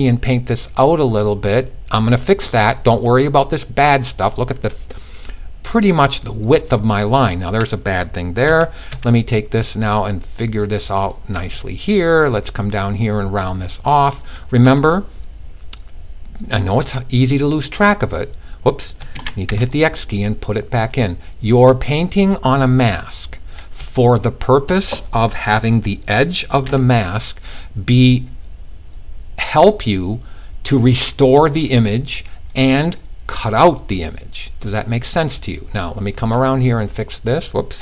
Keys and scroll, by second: 8.0-8.4 typing, 18.7 super+z, 19.0 super+x, 26.1 x, 37.5 super+z, 37.7 typing.